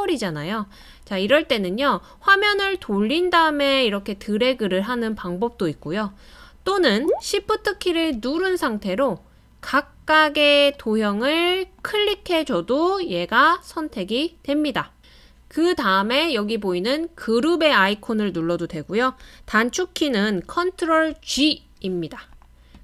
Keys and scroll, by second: 21.1 super+g.